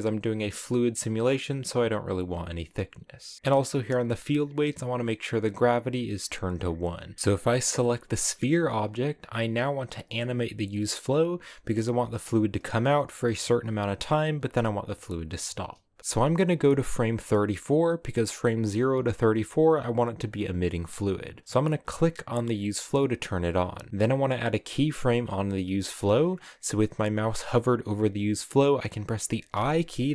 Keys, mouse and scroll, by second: 7.1 a, 8.0 right click, 16.0-17.2 drag, 21.7 click, 29.2 i.